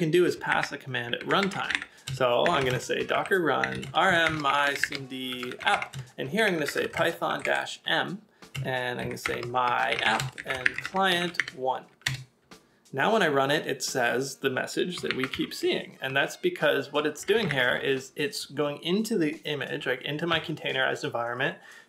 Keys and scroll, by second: 0.5-4.4 typing, 12.0 Return, 15.4 ctrl+a, 17.2 j, 17.6 ctrl+w, 20.3 k.